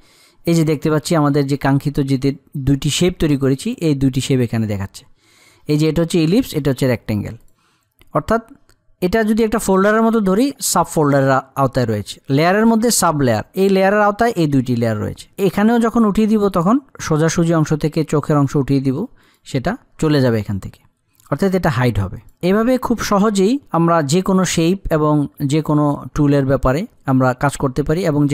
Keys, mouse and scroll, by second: 7.0 click, 12.9 click.